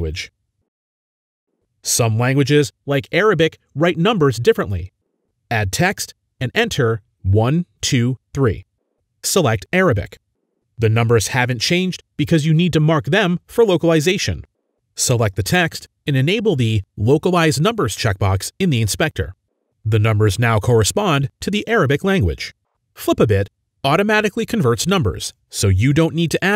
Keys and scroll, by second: 1.0-1.7 typing, 8.5-9.3 typing, 10.9-11.7 typing, 26.2-26.5 typing.